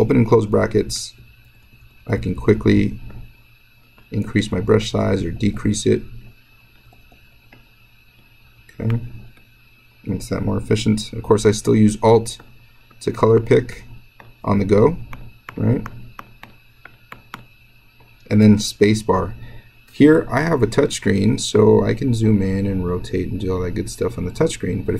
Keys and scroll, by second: 0.6-2.3 typing, 4.4 [, 4.6 [, 5.3 [, 6.9 [, 8.3 [.